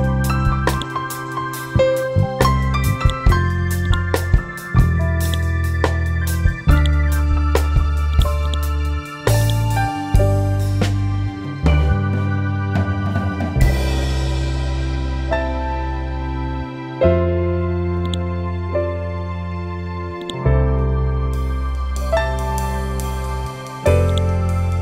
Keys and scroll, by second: 12.3 Right, 13.5 Down.